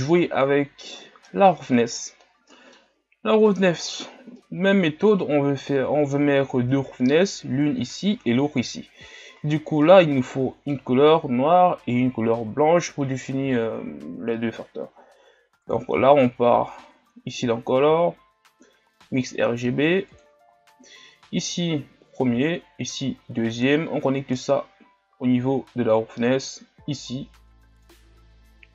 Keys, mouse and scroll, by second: 27.2-28.7 drag.